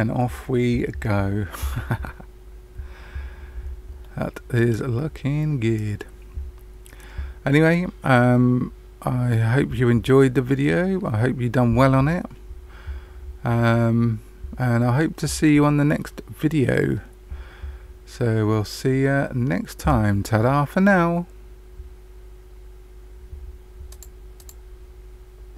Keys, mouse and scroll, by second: 4.0 middle click, 23.8 click, 24.3 click.